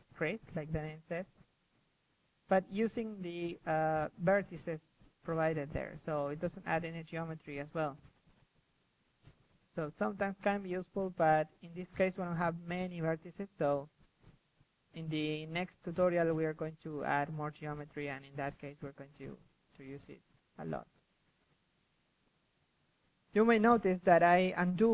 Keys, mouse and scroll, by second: 0.0-1.1 typing, 0.1-0.6 drag, 0.7 click, 1.2 click, 2.3-4.6 typing, 3.4-3.8 drag, 5.3-6.6 drag, 6.2 KP_3, 8.6 f, 8.8-11.3 drag, 9.1 f, 9.5 f, 11.3-12.5 middle drag, 12.5 KP_3, 12.8-13.3 middle drag, 13.8-14.6 middle drag, 14.6 click, 14.6 KP_1, 14.8 click, 14.9 middle click, 15.0 click, 15.2 click, 15.5 click, 16.0 middle click, 16.2 click, 16.3 middle drag, 16.5 f, 16.7-19.3 drag, 19.1 s, 20.0 g, 20.8-21.1 drag, 21.1 KP_3, 21.3 drag, 21.6-24.9 drag.